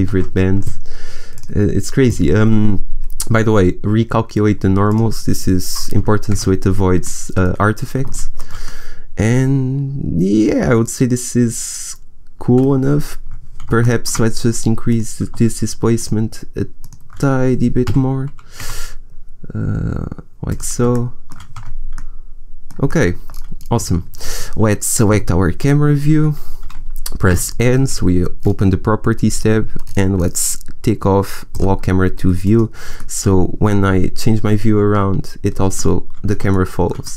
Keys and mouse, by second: 0.0 ctrl+z, 4.8-6.3 drag, 6.3 Tab, 13.2 Tab, 14.0 middle click, 17.8 g, 21.0 middle click, 21.5 Tab, 25.2 KP_0, 29.5 n, 31.4 middle click, 32.8-34.4 middle drag, 35.7-37.1 middle drag.